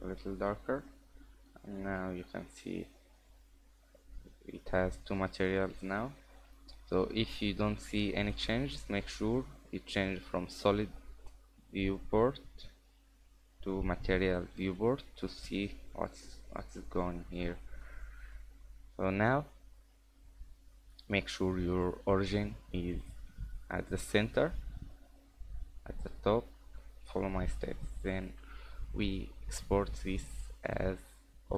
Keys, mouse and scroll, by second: 0.0-0.3 scroll down 3, 0.3 scroll up 3, 0.5 Tab, 0.9 middle click, 1.7 scroll up 2, 2.7-3.6 scroll down 2, 3.1 middle click, 3.6-3.9 scroll up 2, 4.4-4.7 scroll down 2, 4.7 middle click, 6.4 click, 7.1 scroll up 1, 7.5 middle click, 7.8 scroll down 3, 8.4 scroll up 1, 12.8 click, 13.9-14.2 scroll down 2, 14.2 scroll up 3, 14.4 middle click, 16.6-17.0 scroll down 3, 16.8 middle click, 17.4-17.9 scroll up 3, 18.0 middle click, 18.7 middle click, 19.7-20.3 scroll up 1, 20.3 middle click, 20.3-20.7 scroll up 1, 23.2 middle click, 26.6-27.0 scroll down 3, 26.8 middle click, 29.2 click.